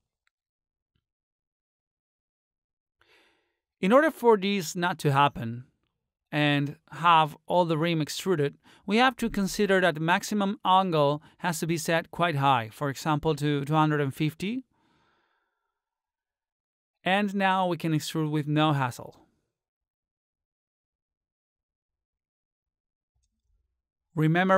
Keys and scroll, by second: 6.9 ctrl+z.